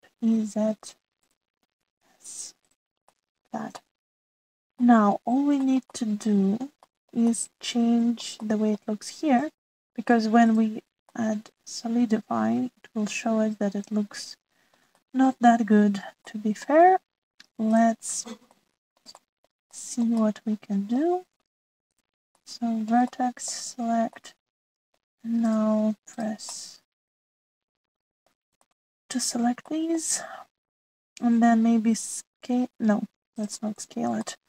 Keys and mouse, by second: 0.3 e, 2.7 s, 4.1 click, 4.8 shift+middle click, 5.8 click, 6.4 shift+middle click, 6.9 middle click, 7.9 shift+middle click, 8.3 middle click, 9.4 shift+middle click, 11.4 click, 12.0-15.7 middle drag, 16.0 shift+click, 16.2 shift+middle click, 17.3 middle click, 18.6 middle click, 19.5 middle click, 20.1 shift+middle click, 20.7 middle click, 21.2 middle click, 22.9 middle click, 23.3 middle click, 23.5 right click, 23.7 middle click, 24.2 shift+click, 24.4 shift+middle click, 25.1 middle click, 26.3 click, 27.5-29.4 middle drag, 29.7 shift+middle click, 30.6 middle click, 32.6 s.